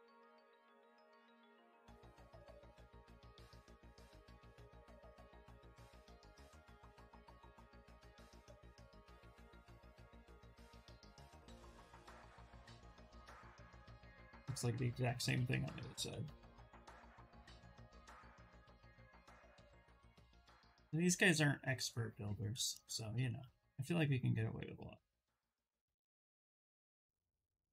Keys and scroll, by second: 0.1 ctrl+z, 1.3 ctrl+w, 1.7 ctrl+z, 2.6 ctrl+z, 3.8 ctrl+w, 5.7 w, 14.9 q, 23.0 ctrl+z.